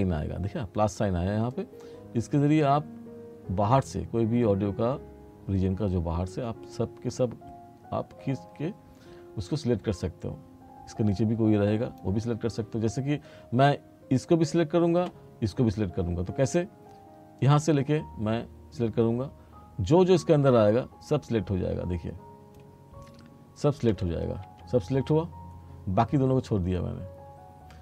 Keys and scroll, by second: 24.0 r.